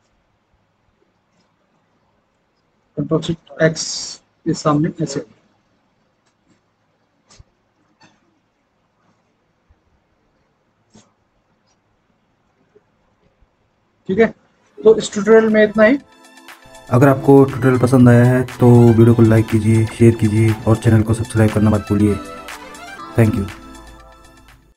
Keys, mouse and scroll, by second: 3.7 ctrl+alt+x.